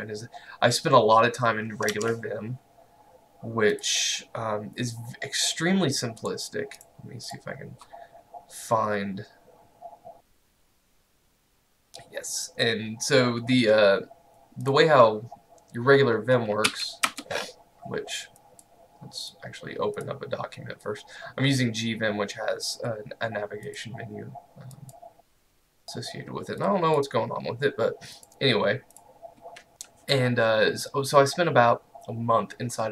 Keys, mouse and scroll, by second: 3.8 click, 10.8 click, 14.7 click, 16.7 j, 17.1 Return, 18.4 click, 23.7 click.